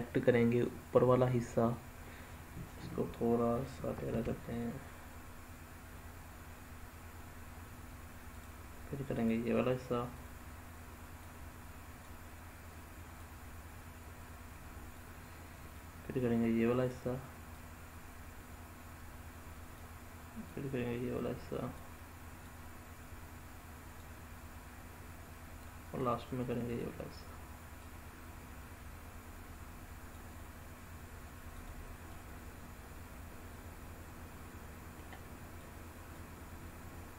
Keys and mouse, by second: 0.6-1.7 drag, 4.0 g, 8.2 click, 9.1 click, 10.1 click, 11.1 click, 13.2-14.8 drag, 15.7-16.8 drag, 17.4-19.7 drag, 20.4-21.8 drag, 22.4-23.9 drag, 25.9 click, 27.8-30.0 drag, 31.6 click, 32.1-34.9 middle drag, 35.6 click.